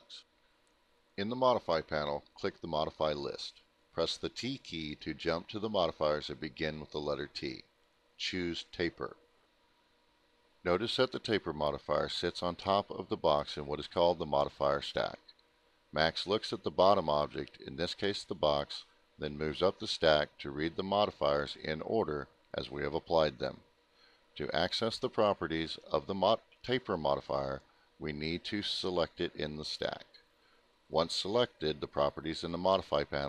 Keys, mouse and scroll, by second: 0.3 click, 6.7 click, 13.7 click, 18.1 click.